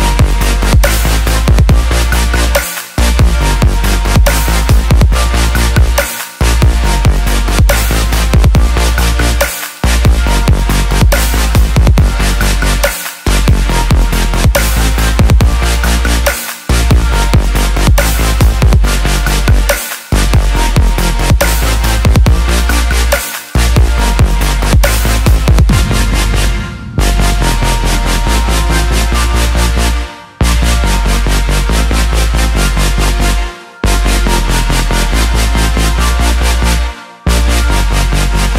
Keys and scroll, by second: 17.9 ctrl+j, 32.7 ctrl+t.